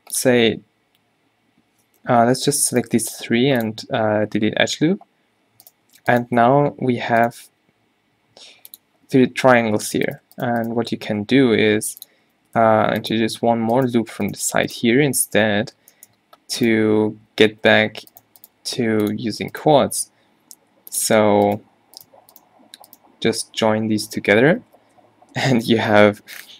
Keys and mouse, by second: 2.2 ctrl+z, 3.2 x, 4.4 a, 6.6 g, 7.5 g, 11.1 g, 12.4 ctrl+r, 15.4 q, 15.6 q, 15.9 g, 17.4 g, 18.6 g, 19.8 g, 24.8 alt+j, 25.5 a, 26.0 Tab.